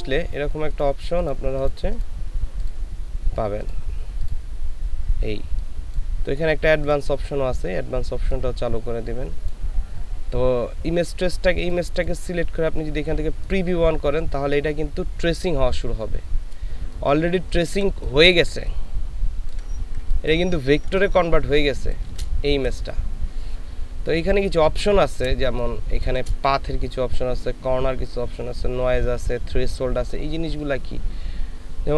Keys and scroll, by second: 16.9 ctrl+space, 18.5 ctrl+space, 20.0 ctrl+space, 20.9 ctrl+space, 25.5 ctrl+space.